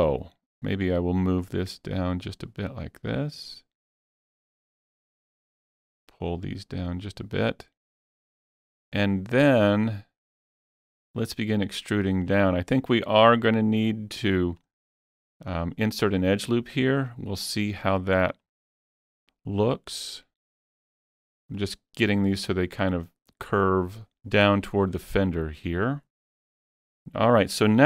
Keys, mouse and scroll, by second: 0.6-1.7 drag, 5.7-9.9 drag, 9.9-13.0 drag, 13.0-17.5 drag, 17.5-19.7 drag, 19.7-24.0 drag.